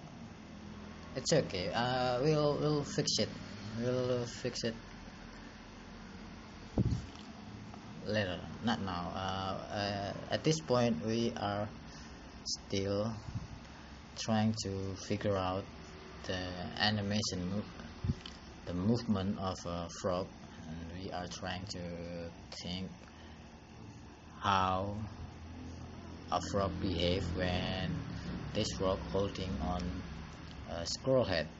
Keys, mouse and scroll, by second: 17.0 click, 23.3 click.